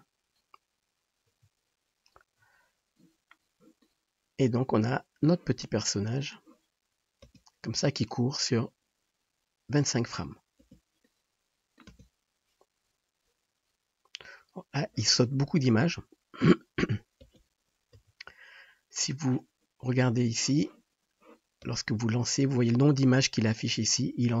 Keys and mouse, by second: 0.0 click, 1.5-20.2 drag, 1.5 [, 7.7 space, 10.8 space, 12.2 space, 17.6 space, 17.9 KP_0, 20.2-24.4 middle drag, 21.8 space.